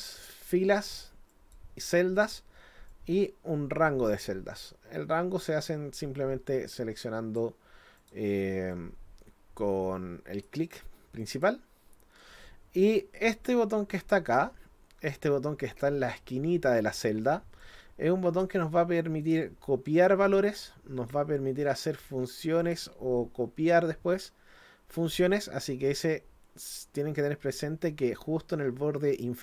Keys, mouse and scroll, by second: 0.3 click, 1.3 click, 2.9-7.4 drag, 8.0 click, 8.7-10.4 drag, 11.2 click, 17.6 click, 19.2 click, 20.3 click, 22.0 click, 22.6 click.